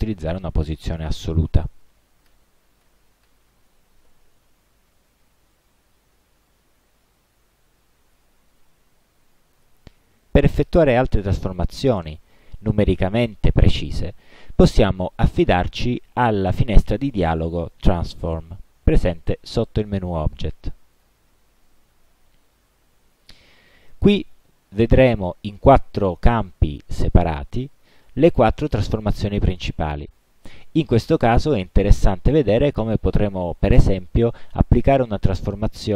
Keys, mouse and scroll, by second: 1.7 0, 2.4 Tab, 2.9 0, 3.3 Tab, 7.3-8.4 drag, 18.4 click, 22.3 click, 23.2 click, 24.4 click, 25.2 click, 25.8 click, 26.5 click, 27.2 click, 27.9 click, 28.4 click, 29.0 click, 31.0 click.